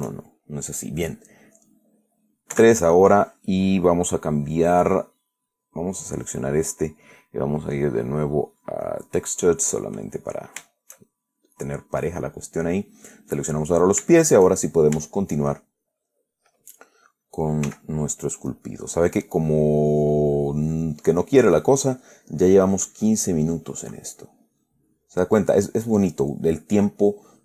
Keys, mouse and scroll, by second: 0.1-1.2 shift+drag, 2.8 3, 5.8 right click, 8.0 click, 9.2 click, 10.1 click, 11.0-11.9 shift+middle drag, 12.2 right click, 13.9-16.8 middle drag, 16.3 click, 18.0 f, 18.8 click, 20.1-22.2 drag, 22.3-23.6 drag, 23.6-24.3 middle drag, 24.3 middle click, 25.0 click, 25.7-27.4 drag.